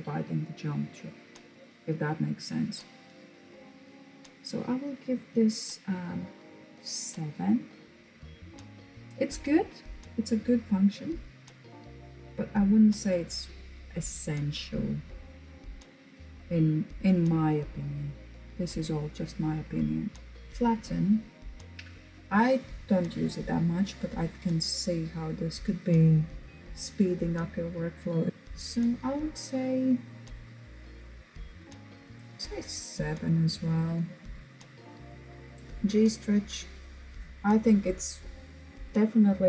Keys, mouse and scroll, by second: 5.0 click, 31.7 click.